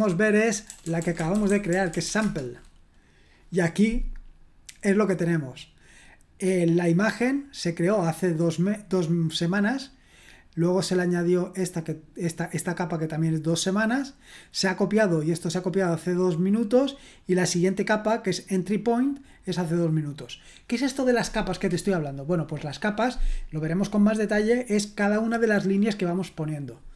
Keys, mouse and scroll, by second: 0.2-2.5 typing, 8.4-10.1 drag, 11.6-13.7 drag, 15.0-16.7 drag.